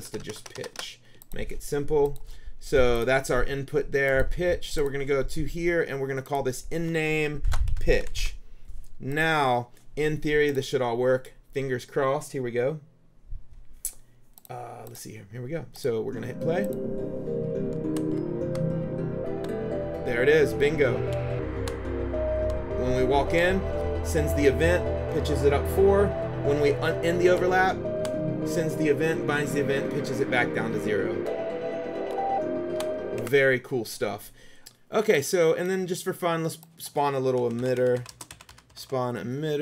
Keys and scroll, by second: 0.0 BackSpace, 7.3-8.8 typing, 17.9 Down, 18.3 Right, 18.9 Up, 21.2 Down, 22.6 Up, 27.5 Down, 30.5 Up, 32.2 Down, 33.3 Escape, 34.6 Delete, 37.2-39.4 typing.